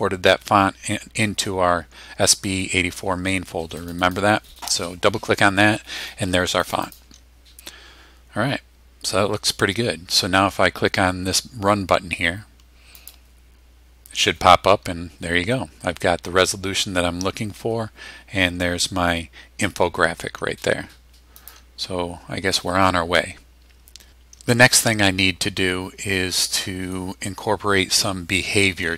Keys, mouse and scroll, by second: 3.8 click, 6.6 click, 13.0 click, 21.4 click.